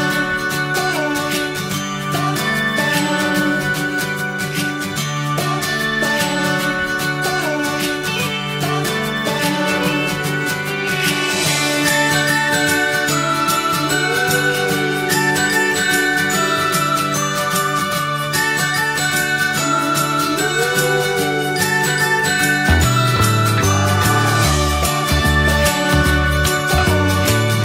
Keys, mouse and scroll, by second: 2.6-3.4 scroll down 2, 2.8 Tab, 3.4 click, 3.7 shift+middle click, 4.4 click, 5.2 s, 6.1 click, 6.9 scroll down 1, 7.1 middle click, 7.4 alt+z, 7.7 click, 8.0 middle click, 8.6 click, 8.9 alt+middle click, 9.8 shift+d, 11.1 alt+middle click, 11.7 s, 12.4-13.7 alt+middle drag, 13.7 click, 14.3 middle click, 15.2 shift+click, 15.5 shift+click, 16.1 shift+click, 16.4 shift+click, 16.7-18.1 middle drag, 18.1 ctrl+j, 18.5 click, 18.7-20.0 middle drag, 20.0 scroll down 1, 20.2-24.1 middle drag, 24.1 click, 25.5 click, 26.1-27.6 drag.